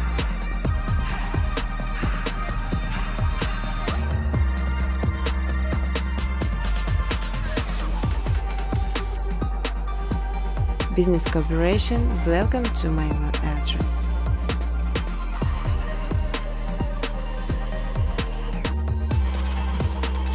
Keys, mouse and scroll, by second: 0.0-1.9 typing, 3.8-6.6 typing, 8.4 click, 8.6 click, 9.9 click, 10.6 click, 11.2 click, 12.3-13.1 typing, 13.7 Tab, 18.0-18.8 typing.